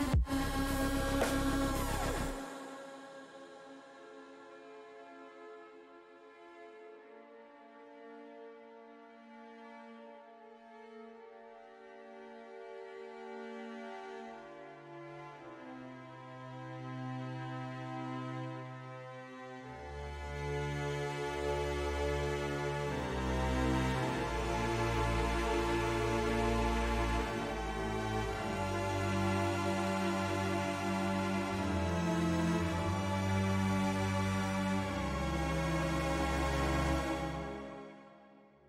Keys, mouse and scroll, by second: 0.0-0.2 typing, 1.8 click, 2.3-8.4 drag, 4.5 s, 8.6 click, 12.7 shift+middle click, 15.5 middle click, 18.7 ctrl+r, 21.9 right click, 24.9 click, 26.4 ctrl+r, 28.4 click, 29.4 click, 32.8 click, 33.9 click, 35.6 middle click, 37.0 shift+click.